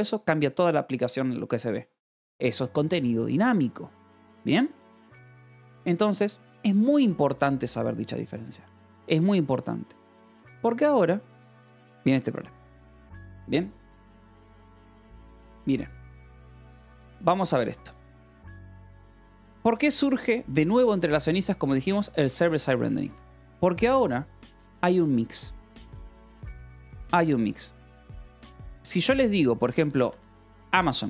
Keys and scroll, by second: 15.9 alt+Tab, 16.4 Escape, 16.8 j, 19.2 k, 20.1 shift+v, 22.9 Escape, 23.1 k, 27.0 o, 27.4 Return, 28.0 BackSpace, 30.3-31.0 typing.